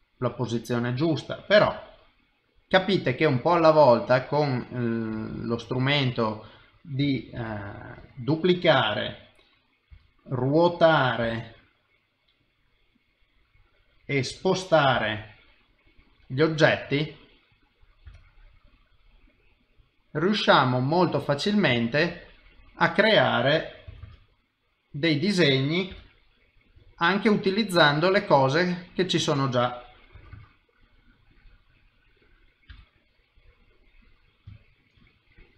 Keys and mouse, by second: 1.6 g, 3.6 middle click, 5.2 shift+middle click, 5.6 middle click, 7.3 shift+d, 8.7 middle click, 9.9 r, 16.2 middle click, 18.0 g, 20.3 middle click, 21.8 ctrl+middle click, 22.2 middle click, 23.9 s, 25.9 g, 26.8 middle click, 27.7 click, 28.0 middle click, 30.1 s, 31.3 middle click, 32.7 g, 33.8 middle click, 34.4 i, 34.6 ctrl+middle click, 35.0 middle click.